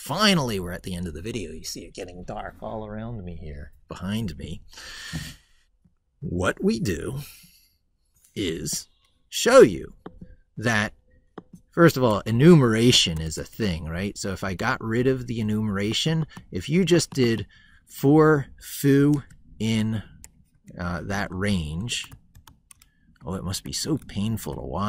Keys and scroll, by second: 21.3 ctrl+z.